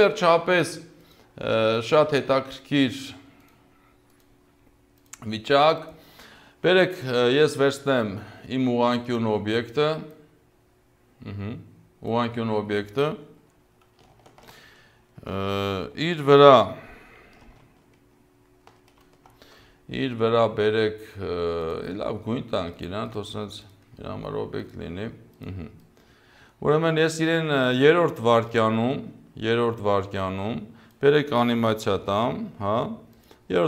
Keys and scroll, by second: 14.5 ctrl+alt+BackSpace, 18.7 ctrl+alt+Home, 32.0 p.